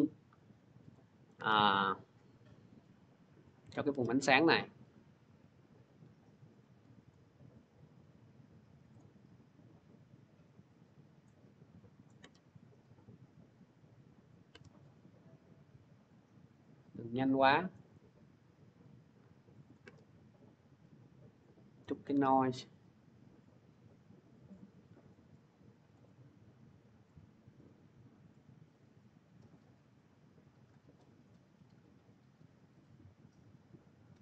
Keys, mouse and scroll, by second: 0.4-0.8 scroll, 1.1 scroll, 3.3 middle click, 6.9 click, 8.8 click, 11.1 click, 11.9 click, 15.9 click, 17.7 click, 19.5 click, 22.8 middle click, 25.7 click, 30.5 click.